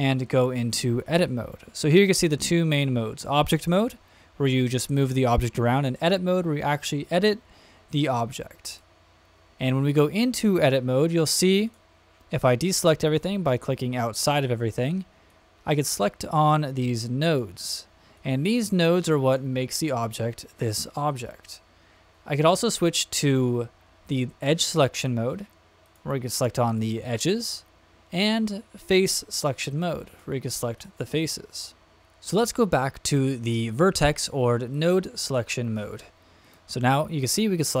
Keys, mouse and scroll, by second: 11.6 click, 15.3-16.0 drag, 16.9-17.4 drag, 18.1-18.6 drag, 19.0-19.4 drag, 21.4 click, 24.9 click, 25.8 click, 26.6 click, 27.2 click, 28.2 click, 28.9 click, 30.1 click, 30.7 click, 31.2 click, 34.7 click, 36.4 click, 36.8-37.2 drag, 37.5 drag.